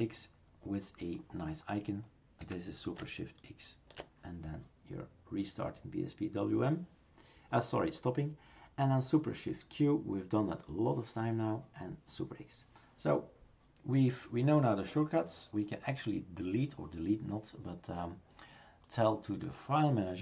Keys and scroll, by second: 2.4 Escape.